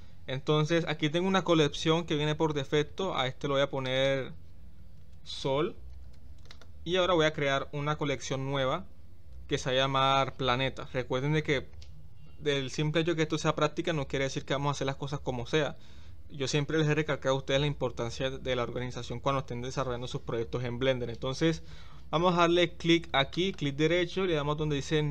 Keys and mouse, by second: 3.9-6.7 drag.